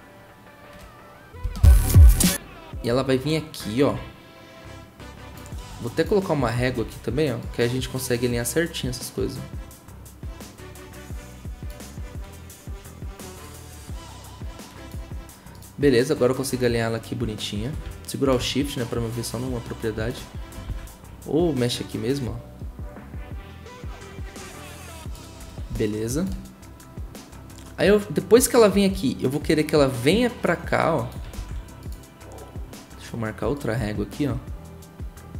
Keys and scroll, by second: 6.8 ctrl+r, 20.6 ctrl+z, 31.3 ctrl+z.